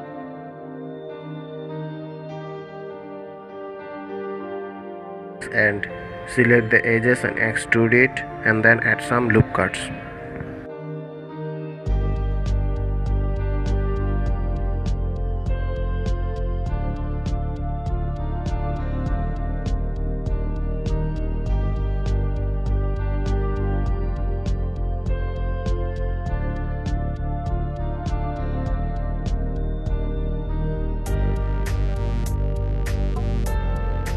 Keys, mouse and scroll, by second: 1.0-2.5 middle drag, 2.5 1, 3.3 click, 4.6 2, 5.1 click, 5.6-6.6 middle drag, 6.6 shift+click, 7.2-8.3 middle drag, 8.3 KP_1, 9.8-10.4 scroll down 7, 11.0-11.5 scroll up 2, 13.2 e, 17.1-17.4 scroll up 2, 19.5 ctrl+r, 25.2-26.0 scroll down 2, 26.0 ctrl+r, 27.8-30.9 middle drag, 32.5-34.1 middle drag.